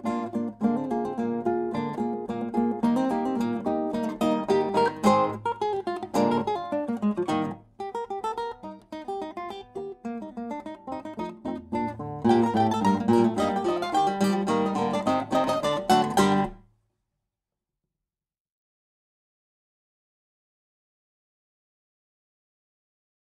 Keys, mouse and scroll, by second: 6.3-8.4 drag, 8.7-10.9 drag, 10.9 middle click, 11.5-14.1 drag, 14.3-16.8 drag, 20.7-22.7 right drag, 22.2 click.